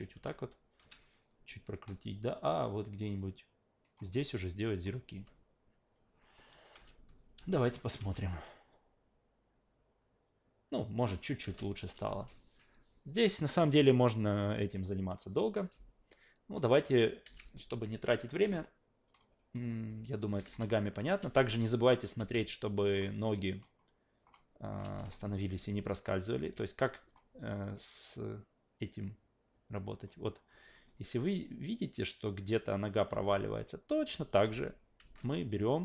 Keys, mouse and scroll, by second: 0.1 s, 0.8 a, 1.9-3.9 drag, 4.8 click, 5.1 a, 6.4 alt+middle click, 6.7 alt+v, 7.3 alt+v, 7.8 click, 7.9 alt+v, 11.5 alt+v, 11.7 click, 16.6 alt+middle drag, 17.2 alt+v, 19.1 click, 20.2 click, 20.4 alt+v, 21.3 alt+middle click, 21.6 alt+right click, 21.9 alt+middle click, 22.2 alt+v, 22.4-22.7 alt+middle drag, 23.6 alt+middle drag, 24.3-24.7 alt+middle drag, 24.8 alt+v, 25.9 click, 26.4 q, 27.1 click, 28.0-30.1 drag, 30.7-32.9 alt+drag, 33.1 alt+v, 34.1 alt+v, 34.5 alt+v, 35.0 alt+v, 35.6-35.8 drag.